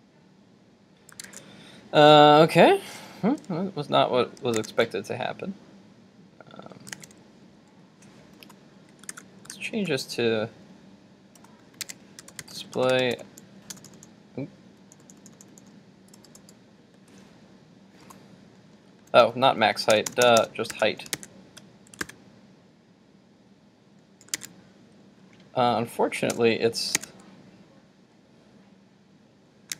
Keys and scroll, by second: 1.4 super+Tab, 4.5 super+Tab, 7.1 super+Tab, 9.1 super+z, 20.8 super+s, 21.3 super+Tab, 22.0 super+r, 24.5 super+Tab.